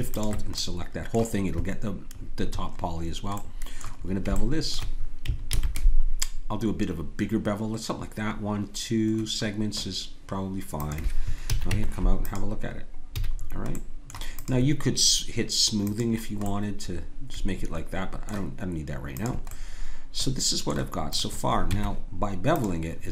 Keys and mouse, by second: 0.1 click, 5.5 ctrl+b, 11.5 a, 11.7 Tab, 13.2 a, 15.1-16.4 drag, 17.5 click, 17.7 middle click, 19.1-23.0 drag, 21.7 Tab.